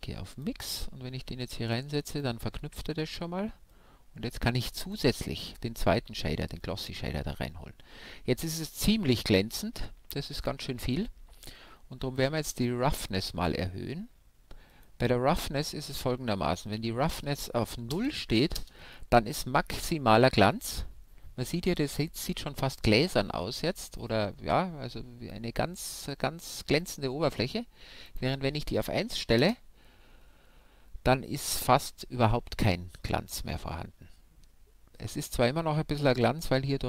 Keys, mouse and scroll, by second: 3.7-5.3 drag, 5.4 click, 5.8-13.1 middle drag, 13.1-15.0 drag, 16.7-18.5 drag, 28.1-30.1 drag.